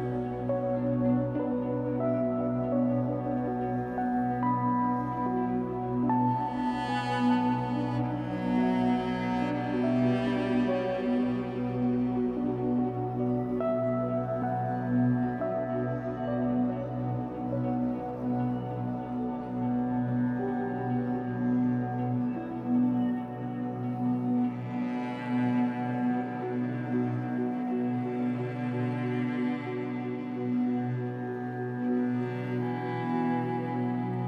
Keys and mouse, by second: 1.7 shift+click, 2.6 click, 3.0 space, 4.7 space, 5.2 click, 5.5 space, 6.9-7.6 typing, 8.8 click, 8.9-9.6 typing, 10.8-12.2 drag, 12.0-12.8 typing, 14.3-15.1 typing, 16.5 click, 16.9-18.6 typing, 21.2 space, 22.1 ctrl+alt+click, 23.0 click, 23.3 click, 23.9 click, 24.8 click, 25.4-28.3 drag, 29.2 click, 29.7 click, 30.3 click, 32.4 click, 32.6 click.